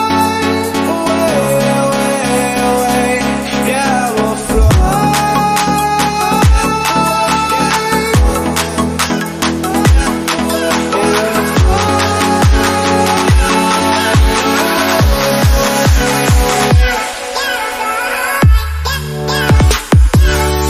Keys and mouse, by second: 6.1-20.6 drag.